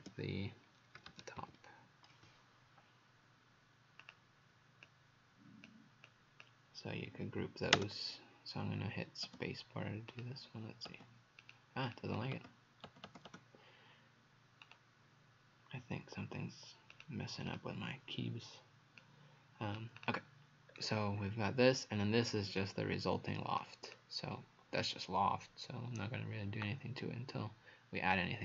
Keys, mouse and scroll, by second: 0.0-1.5 typing, 4.0 click, 10.1 click, 11.4 click, 11.9 click, 14.7 right click, 16.9 click, 17.5 click, 19.0 click, 20.7-21.2 scroll down 2, 21.6-22.6 scroll up 2, 22.6 click, 22.6-23.6 scroll up 1.